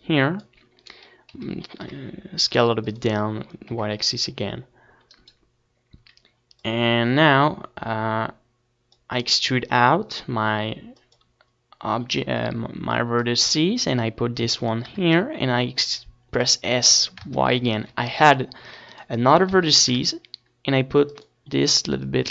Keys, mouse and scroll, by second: 2.0-3.9 drag, 4.5 s, 6.2-8.3 drag, 7.1 e, 8.7-10.0 right drag, 10.0 middle click, 10.4-12.2 drag, 13.2 s, 15.0-17.0 drag, 17.3-19.4 drag, 18.7 s, 20.8-22.3 drag, 21.5 a, 21.9 ctrl+r.